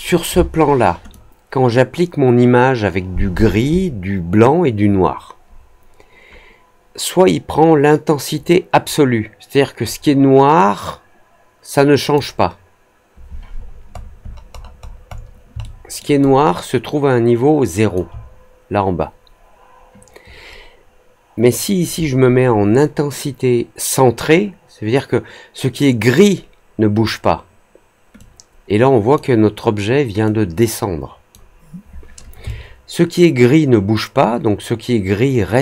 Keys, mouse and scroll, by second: 1.0-12.1 drag, 13.5 middle click, 13.9 middle click, 14.1 middle click, 14.5 middle click, 14.6-15.2 scroll down 3, 15.5 alt+middle click, 16.1-17.9 alt+drag, 21.4-26.1 drag, 28.1-29.1 drag, 30.2-31.2 drag, 32.4-35.5 alt+drag.